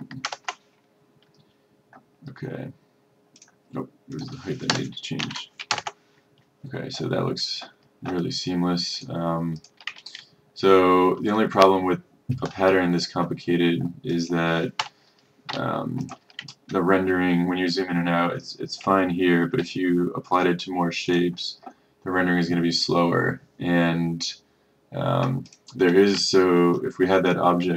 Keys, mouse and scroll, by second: 0.3 Return, 3.4 click, 4.8 BackSpace, 5.3 KP_5, 5.8 Return, 9.0 click, 10.1-10.4 ctrl+scroll, 10.6-11.4 ctrl+scroll, 11.8 middle click, 14.2 click, 15.6 Delete, 16.2 click, 17.0 ctrl+scroll, 18.0-18.5 ctrl+scroll, 19.2 ctrl+scroll, 20.1 ctrl+scroll, 21.2 click, 26.3-26.7 ctrl+scroll, 27.4 click.